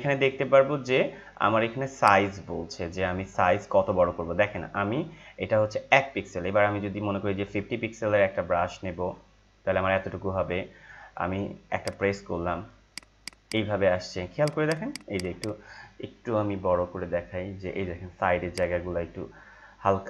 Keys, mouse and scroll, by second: 1.9-11.8 drag.